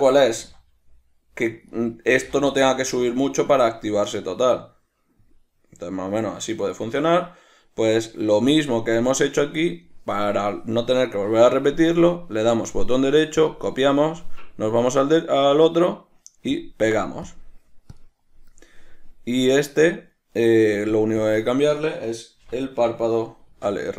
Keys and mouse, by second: 0.0-2.1 ctrl+middle drag, 0.6 g, 2.1 right click, 2.3 g, 7.1 right click, 8.3 right click, 12.6-14.4 right drag, 14.4 click, 15.2-17.6 right drag, 17.6 click, 18.2 drag, 21.2-23.9 drag.